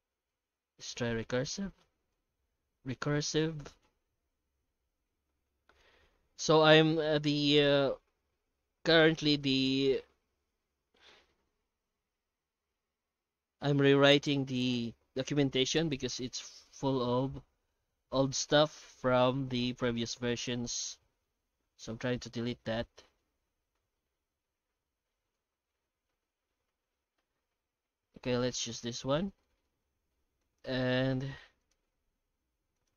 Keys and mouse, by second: 13.7-14.2 middle drag, 16.8 middle click, 17.1 F9, 28.8 middle click, 29.6 shift+middle drag, 30.4 right click, 30.7 Tab, 31.4 Tab, 31.6 right click, 31.8 Tab, 32.3 Tab, 32.7 right click.